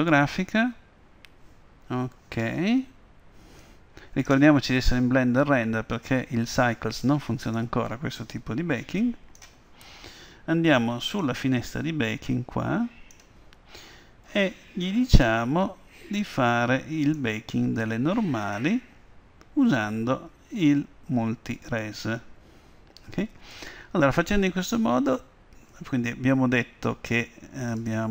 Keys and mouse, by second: 3.6-5.5 drag, 6.0-10.9 drag, 11.1-14.2 drag, 17.1-19.0 drag, 21.7-23.6 drag, 27.7-28.1 drag.